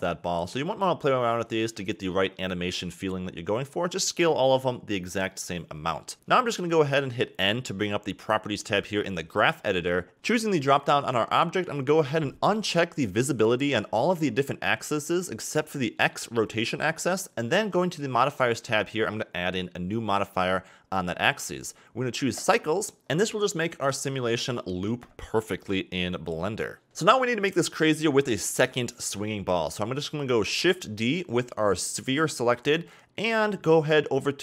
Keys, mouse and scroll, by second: 1.0 click, 1.7 s, 4.1-5.3 scroll down 4, 5.3-5.9 scroll up 3, 7.1 n, 8.9 click, 10.1 click, 11.2-15.3 drag, 16.9 click, 18.5-21.5 drag, 21.7 a, 21.8 a, 22.8-23.6 scroll down 7, 23.6-24.2 scroll down 6, 24.4 scroll up 2, 27.7 scroll up 2, 28.4-28.8 scroll down 3, 28.8-29.1 middle drag, 29.1 KP_3, 30.0 shift+d.